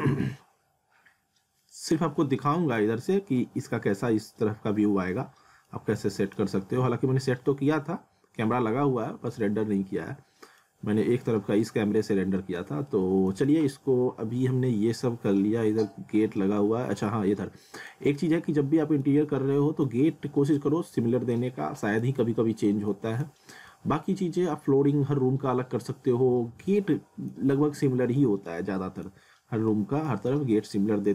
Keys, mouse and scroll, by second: 0.3 alt+middle click, 2.6-3.6 scroll down 1, 5.3 scroll up 1, 5.7 alt+middle click, 9.1 scroll up 1, 9.3 middle click, 12.9 middle click, 13.5 alt+middle click, 18.1 scroll down 1, 18.4 alt+middle click, 20.5 scroll up 1, 21.3 alt+middle click, 22.6 scroll down 1, 22.9 alt+middle click, 23.5 scroll up 1, 23.7 alt+middle click, 26.7 middle click, 28.2 middle click, 30.3 alt+middle click.